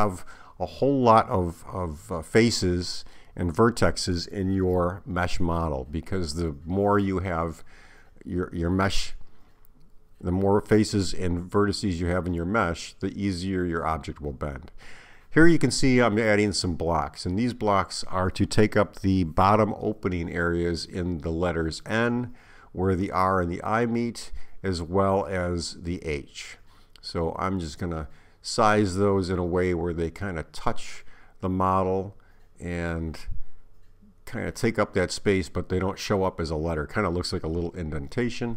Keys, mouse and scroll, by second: 5.8 Tab, 10.1 shift+a, 14.6 s, 20.3 g, 23.7 click, 29.3 s, 31.8 click, 35.9 click, 38.4 s.